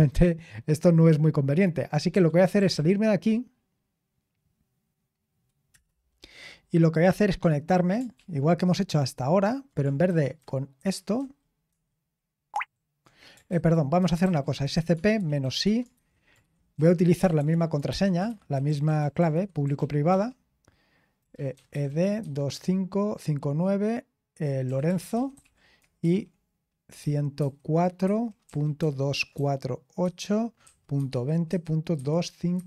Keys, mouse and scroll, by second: 1.8-3.1 typing, 5.6 Return, 8.1 ctrl+p, 10.0 alt+b, 10.3 alt+b, 10.7 alt+b, 11.1 alt+b, 12.5 alt+g, 14.7 ctrl+c, 15.6-20.2 typing, 21.6-22.9 typing, 24.6-32.6 typing, 27.3 Tab.